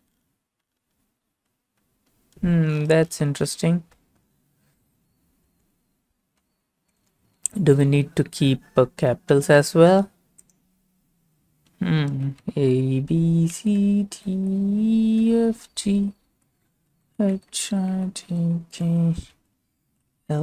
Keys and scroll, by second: 3.9 alt+Tab, 5.3 alt+Tab, 7.0 alt+shift+Tab, 12.1-20.3 typing.